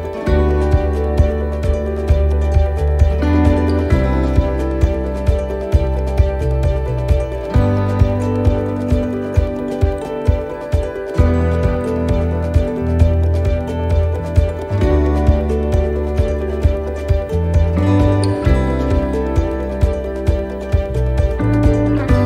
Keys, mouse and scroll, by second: 0.1 scroll down 1, 0.5 shift+middle click, 1.0 scroll down 1, 3.0 scroll down 5, 3.0-3.6 scroll up 3, 3.4 middle click, 4.7 shift+d, 6.6 click, 8.2 shift+middle click, 17.9 shift+middle click, 19.5 shift+middle click, 19.5-19.9 scroll up 4, 21.7 right click, 21.7 click.